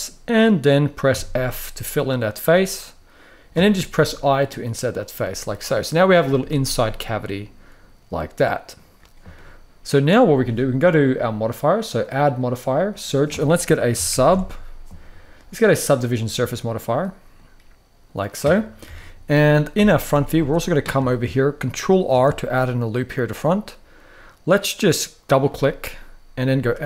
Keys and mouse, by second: 0.8 f, 3.7 i, 4.7 click, 5.1-5.7 middle drag, 6.1 z, 6.6-8.4 middle drag, 9.0-9.8 middle drag, 11.9-16.0 drag, 16.5 middle click, 17.7 middle click, 18.5 KP_3, 19.4 KP_1, 20.1 shift+middle click, 20.8 shift+middle click, 21.8 ctrl+r, 26.2 s.